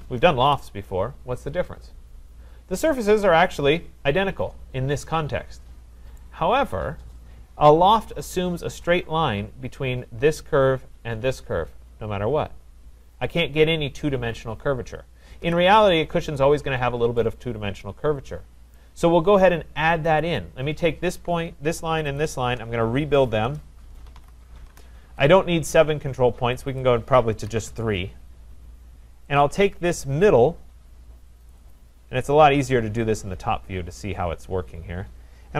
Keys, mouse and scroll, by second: 0.4 Return, 2.8-3.2 scroll, 3.9-4.7 typing, 6.2 right click, 6.6-7.3 scroll, 13.2 click, 15.4 Delete, 16.5-17.2 scroll, 17.2 middle click, 18.7 right click, 20.2 click, 22.2 shift+click, 23.4 Return, 23.8-24.7 typing, 26.8 click, 27.5 3, 27.7 Return, 29.4 click, 31.5 click, 31.7 click, 32.6-33.6 scroll, 33.6-34.1 scroll, 34.1-35.3 scroll, 35.4-35.5 typing.